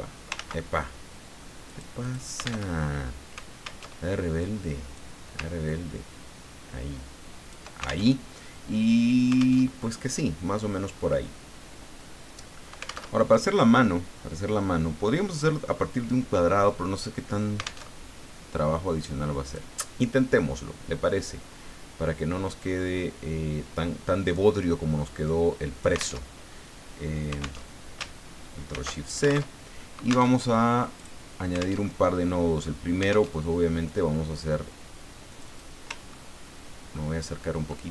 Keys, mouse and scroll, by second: 0.4 ctrl+z, 1.7 click, 2.0 click, 2.7 alt+Tab, 3.8 alt+Tab, 4.4 click, 5.6-7.6 ctrl+drag, 8.1 ctrl+alt+Tab, 9.6 alt+Tab, 13.1 alt+Tab, 17.9 alt+Tab, 19.4 click, 22.6-26.2 drag, 26.2 alt+Tab, 27.6 alt+Tab, 28.7 ctrl+shift+c, 29.5 alt+Tab, 30.3 alt+Tab, 31.0 click, 31.8 alt+Tab, 33.3 alt+Tab, 35.3 click, 36.0-36.7 ctrl+scroll up 2, 36.9-37.6 ctrl+scroll up 2.